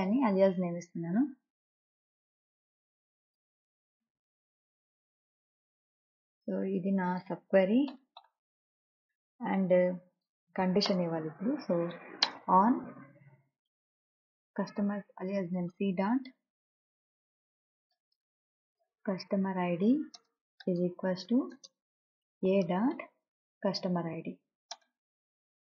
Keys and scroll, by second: 0.5 a, 8.2 Return, 11.2 Return, 11.9 o, 12.3 n, 12.6 space, 14.0 c, 16.1 ., 17.9-24.2 typing, 20.5 Return, 25.1 Return.